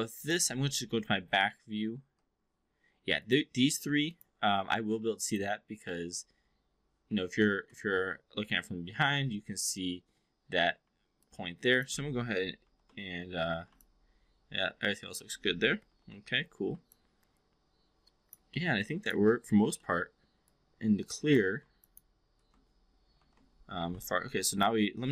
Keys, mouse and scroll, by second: 0.4 v, 3.7 4, 4.1 click, 4.9 3, 5.2 click, 5.8 5, 6.1 4, 11.1-11.9 alt+drag, 12.6 shift+i, 13.7-15.2 alt+drag, 15.7 shift+z, 15.8 shift+i, 16.9-18.4 alt+drag, 18.5 alt+middle drag, 18.9 alt+s, 18.9 alt+click, 19.8 alt+middle click, 20.4-21.3 alt+drag, 21.8 click, 23.1 shift+i, 24.0-24.7 alt+drag.